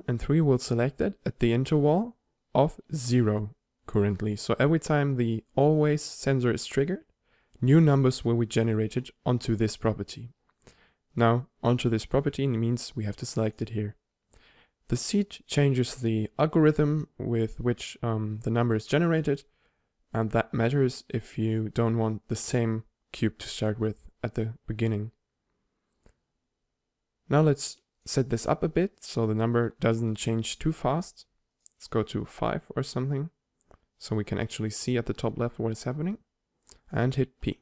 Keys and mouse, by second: 29.9-34.3 drag.